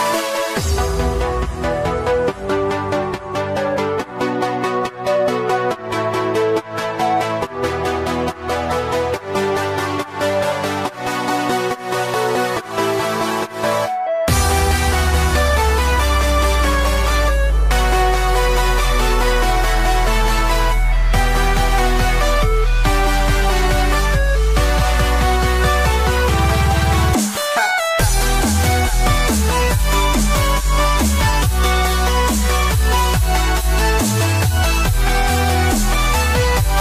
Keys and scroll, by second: 16.5 super+z, 22.1 ].